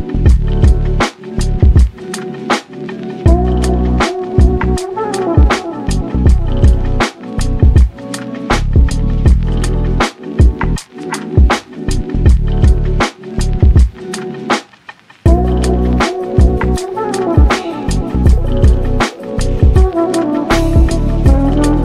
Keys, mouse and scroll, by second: 0.3-2.1 middle drag, 1.4-2.1 scroll up 2, 2.1 z, 2.7 shift+click, 3.4 shift+drag, 4.2 ctrl+click, 4.7 ctrl+click, 5.8 alt+p, 7.0 drag, 7.2 click, 7.8 x, 8.6 click, 9.1 shift+click, 9.5 shift+click, 10.3 g, 11.6 click, 12.0 g, 12.9 z, 13.1 scroll down 3, 13.5 click, 13.7-15.1 middle drag, 15.1 ctrl+s, 15.3-15.8 scroll down 1, 15.8 click, 16.3 g, 17.3 click, 17.6-18.2 middle drag, 18.2 click, 18.7 g, 19.8 click, 20.0 g, 20.9 click, 21.1-21.8 middle drag.